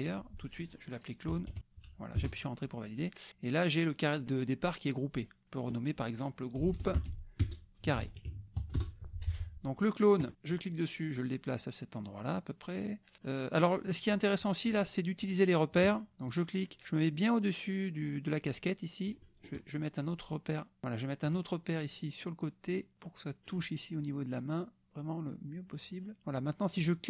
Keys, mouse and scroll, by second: 1.0-2.1 typing, 2.1 Return, 3.5 click, 6.4-8.3 typing, 8.8 Return, 9.7 click, 10.5-13.7 drag, 15.4 click, 16.3-19.3 drag, 21.3-23.6 drag, 25.3 click.